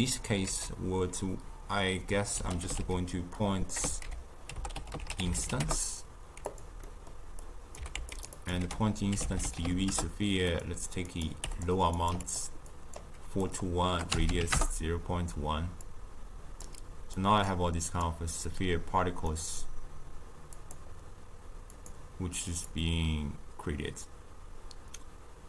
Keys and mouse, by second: 0.5 ctrl+a, 6.9-7.4 middle drag, 7.4-7.8 drag, 7.8 g, 8.4 click, 8.6 ctrl+a, 11.1 click, 12.0 click, 12.7-18.0 drag, 19.3-20.6 middle drag, 20.6 click, 21.7-25.4 drag.